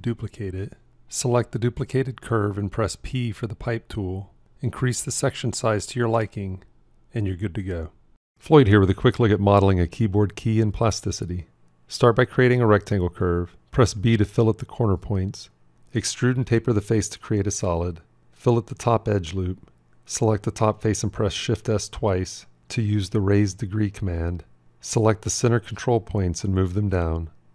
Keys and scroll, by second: 3.6 p, 13.7 b, 22.5 shift+s.